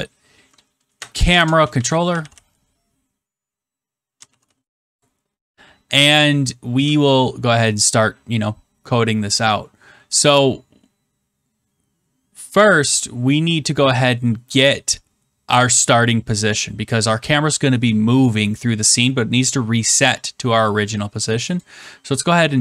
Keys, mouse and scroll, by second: 1.1-2.7 typing, 4.0-5.1 typing, 21.5 click.